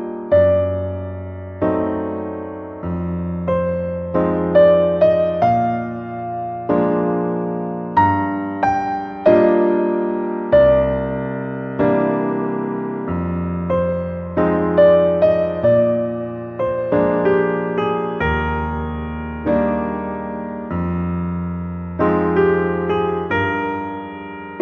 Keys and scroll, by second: 9.1 ctrl+j, 11.5 ctrl+t.